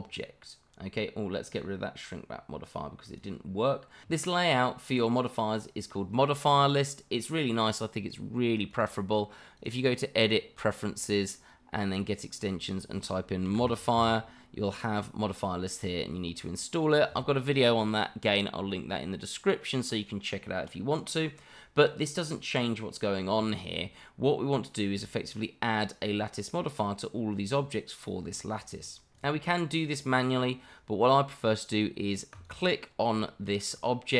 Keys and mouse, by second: 3.0 click, 8.7-9.7 drag, 20.7-22.8 middle drag, 23.8-24.6 middle drag, 26.0-26.5 middle drag, 27.4 click, 29.1 click, 32.3 click, 33.2-33.7 shift+middle drag.